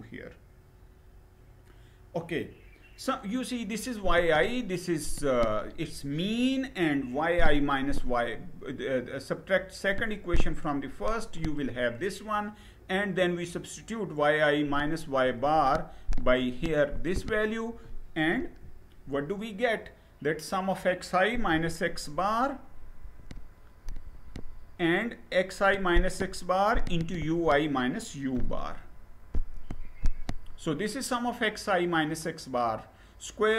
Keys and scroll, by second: 18.0 Down, 21.1 Left, 27.9 Right.